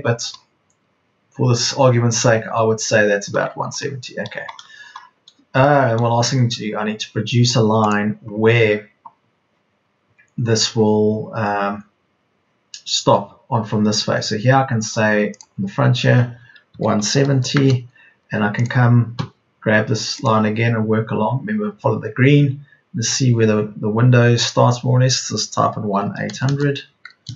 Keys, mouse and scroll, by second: 16.7 KP_1, 16.9 KP_7, 17.2 KP_0, 19.1 Escape, 25.5 KP_1, 25.9 KP_8, 26.2 KP_0.